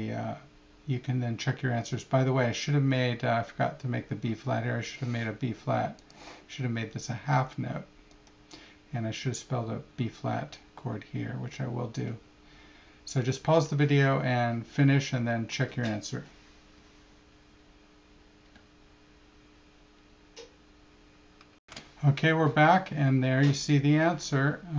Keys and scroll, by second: 21.6 shift+super+p.